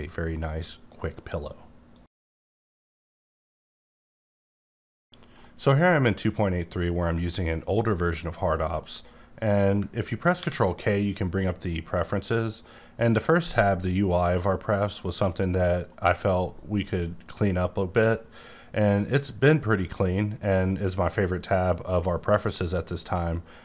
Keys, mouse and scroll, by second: 8.4 middle click, 10.4 ctrl+k, 11.4 click.